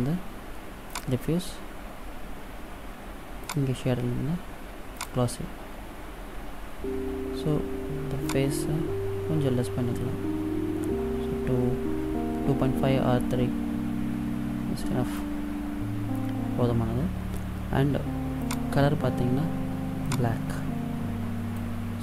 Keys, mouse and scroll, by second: 3.6 click, 6.7 scroll down 1, 8.4 click, 18.5 click.